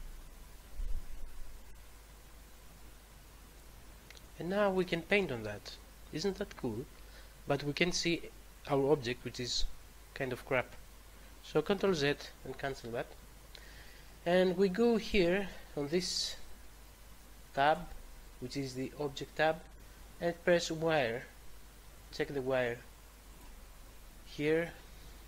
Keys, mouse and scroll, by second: 3.6 click, 11.8 ctrl+z, 17.6 click, 23.2 click.